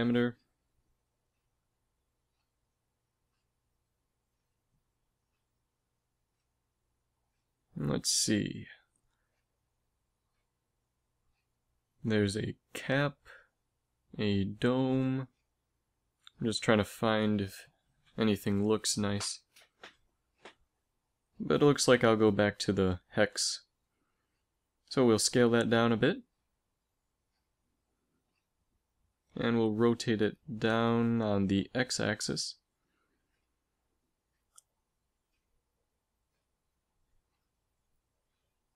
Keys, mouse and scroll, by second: 2.4-4.7 drag, 8.0-9.6 drag, 10.8-12.1 drag, 13.7-15.6 drag, 16.5-18.6 drag, 19.4-21.3 drag, 22.0-23.6 drag, 23.6 middle click, 24.8 s, 27.7 middle click, 27.8 click, 28.9 r, 31.0 click, 31.4 r, 32.1 click, 34.4 s, 35.3 middle click, 37.7 KP_Decimal.